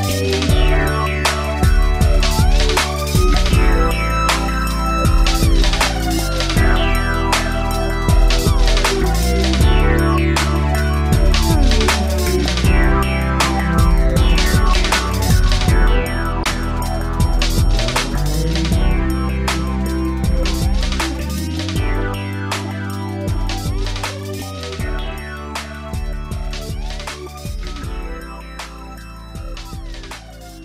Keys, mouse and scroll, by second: 1.0 ctrl+c, 1.3 ctrl+shift+v, 2.6 Tab, 2.7 Right, 2.8 Tab, 2.8 Right, 3.0 Right, 3.2 Right, 5.6 middle click, 8.4 7, 8.9 n, 9.1 shift+middle click, 9.6 scroll up 1, 10.6 r, 11.3 click, 11.4 click, 13.0 ctrl+c, 13.3 ctrl+shift+v, 14.0 middle click, 14.7 middle click, 15.7 Tab, 16.0 Tab, 16.4 Right, 17.1 middle click, 18.7 Left, 19.0 Left, 19.6 ↔, 20.0 Right, 21.0 Right, 23.1 Down, 23.5 Down, 24.0 shift+space, 24.6 Escape, 25.1 shift+space, 25.8 Escape, 28.8 shift+click, 29.9 b, 30.2 click.